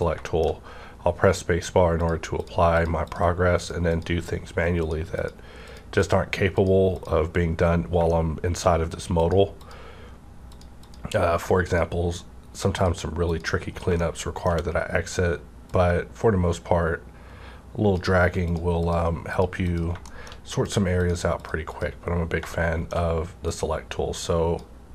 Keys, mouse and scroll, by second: 0.0 scroll down 1, 0.2 shift+middle click, 0.5-2.0 shift+scroll up 2, 2.0 click, 2.1 scroll up 1, 7.3 scroll down 1, 7.6 scroll up 1, 8.1 shift+middle click, 9.2 click, 12.8 click, 14.0 shift+middle click, 15.7-18.8 drag, 20.1 shift+middle click, 20.6 click, 22.5 shift+middle click, 23.5-24.9 drag.